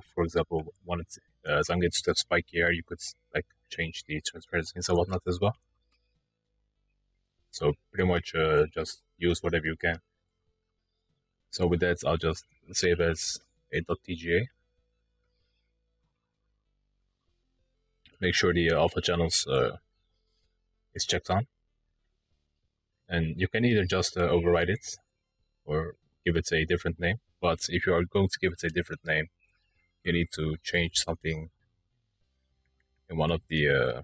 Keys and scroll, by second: 29.7 typing, 31.0-31.7 typing.